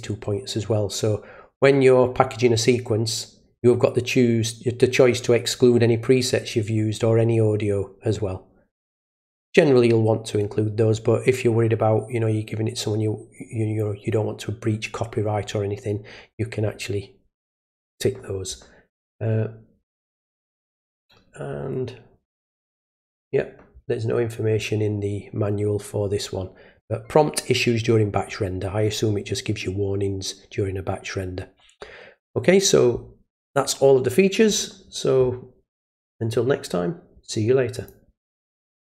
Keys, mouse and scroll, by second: 19.8 scroll down 1, 20.6-21.2 scroll up 2, 21.6-22.6 scroll up 2, 22.6 scroll down 2, 37.8 click, 38.7 click.